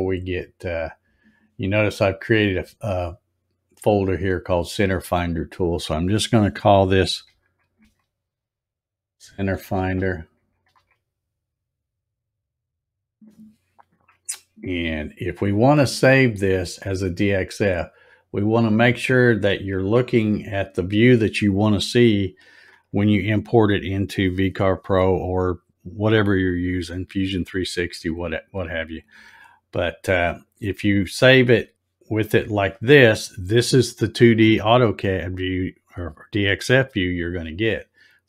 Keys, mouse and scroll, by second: 4.6 middle click, 7.2-11.2 typing, 12.9 click, 18.1 click, 19.2 scroll up 1, 20.1 click, 30.8 scroll up 1.